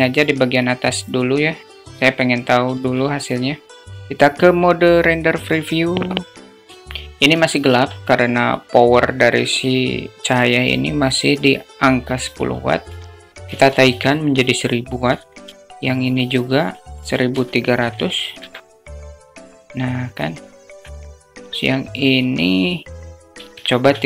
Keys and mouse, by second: 0.3 click, 1.2 KP_0, 5.8 drag, 6.8 alt+shift+middle drag, 11.8-14.1 drag, 13.0 0, 14.9 alt+shift+middle click, 16.1-18.0 drag, 17.3 0, 19.6-20.3 alt+middle drag, 20.7-24.0 drag, 23.4 0.